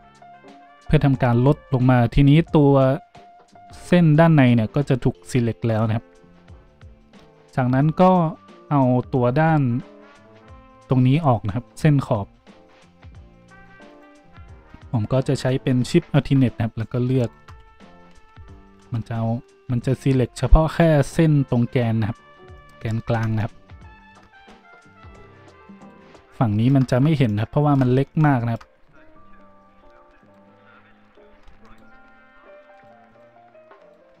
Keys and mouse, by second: 13.9 alt+shift+middle click, 13.9 alt+shift+right click, 17.2 alt+shift+right click, 17.4-30.2 drag, 17.6 z, 18.1 z, 20.7 z, 23.0 z, 24.3 z, 25.7 right click, 30.2 alt+shift+middle click, 30.3-34.2 alt+shift+drag, 31.6 alt+shift+right click, 32.7 alt+shift+right click, 33.0 alt+shift+right click, 33.7 alt+shift+right click.